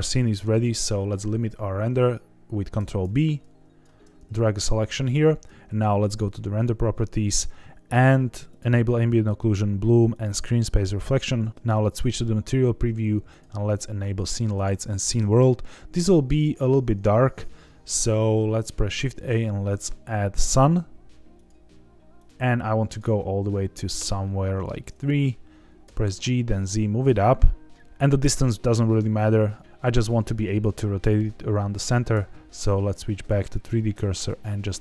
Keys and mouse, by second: 2.7 ctrl+b, 5.1 ctrl+s, 8.4 click, 9.3 click, 10.1 click, 11.5 z, 13.2-14.8 drag, 18.7 shift+a, 23.0-24.5 drag, 25.8 g, 26.0 z, 33.9 r.